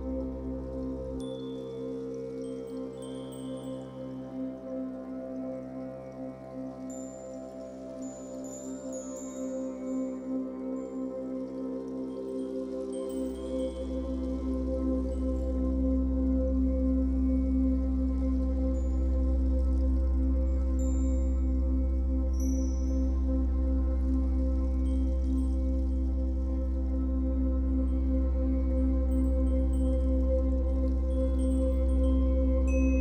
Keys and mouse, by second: 7.0 click, 9.3 click, 10.3 click, 11.1 0, 11.4 Return, 12.8 i, 13.6 click, 14.9-16.2 drag, 17.5-19.2 drag, 20.2 i, 21.3-28.8 drag, 28.8 typing, 30.9 /.